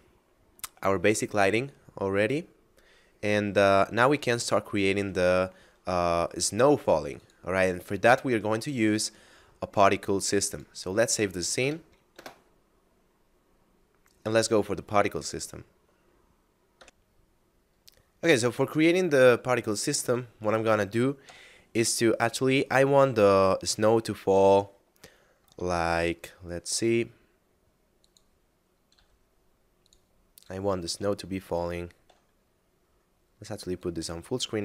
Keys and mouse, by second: 2.5 middle click, 7.2 click, 10.5 click, 11.6 KP_Add, 11.9 Return, 16.7 F10, 16.8 F9, 19.5 shift+middle click, 21.2 KP_7, 24.3 middle click, 25.8 shift+a, 27.9 click, 28.9 s, 29.8 click, 31.3 shift+middle click, 33.7 click.